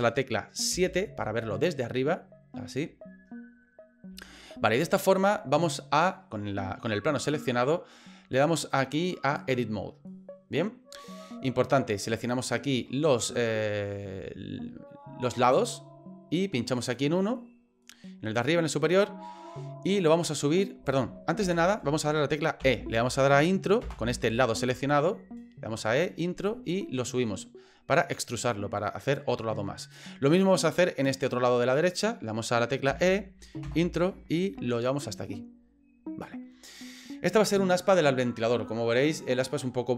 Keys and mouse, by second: 0.7 KP_7, 4.2 shift+middle click, 8.7 click, 15.5 click, 16.8 right click, 18.4-20.9 drag, 21.4 ctrl+z, 22.6 e, 26.5-29.1 drag, 31.1 right click, 32.9 e, 34.4-36.2 drag.